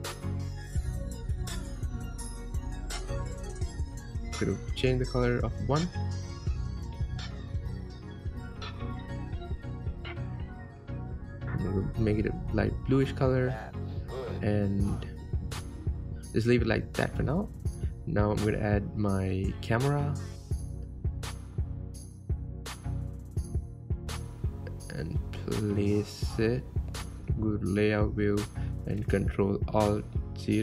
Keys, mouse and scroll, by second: 1.5 click, 8.1 click, 13.2 click, 15.0 click, 17.1-17.5 scroll up 4, 17.8-19.4 middle drag, 19.4 scroll down 3, 19.6 scroll up 1, 19.8-24.9 middle drag, 25.5-25.9 scroll down 3, 26.4 scroll up 3, 27.7 click, 28.2-29.0 scroll down 6, 29.0-30.2 middle drag, 30.2-30.5 scroll up 6.